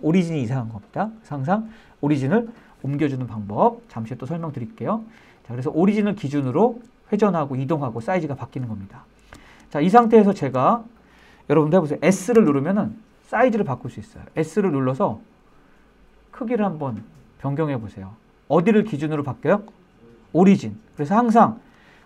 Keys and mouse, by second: 4.7-5.1 middle drag, 6.1 shift+middle drag, 7.8-8.6 shift+middle drag, 8.9 shift+middle drag, 9.6-10.0 shift+middle drag, 10.1-10.8 middle drag, 12.2 s.